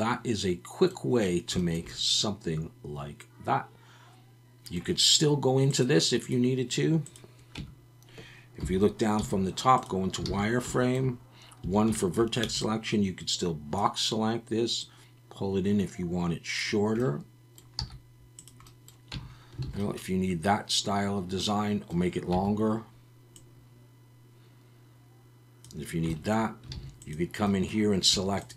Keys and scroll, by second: 7.6 Tab, 8.6 KP_7, 9.2 z, 10.3 alt+a, 11.6 1, 12.4 b, 17.8 z, 19.1 Tab, 19.6 alt+a, 22.3 Tab, 26.7 alt+a.